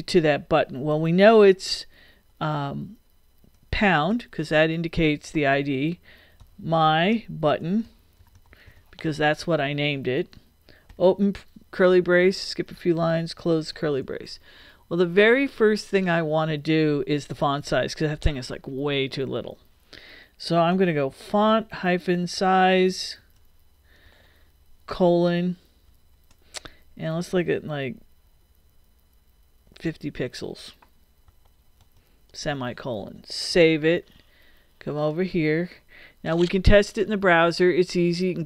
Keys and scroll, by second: 4.1 shift+3, 6.4-9.1 typing, 10.9 shift+[, 12.2 Return, 13.2 shift+Return, 13.7 shift+], 20.5-25.8 typing, 29.6-32.5 typing, 33.0 super+;, 33.5 super+s.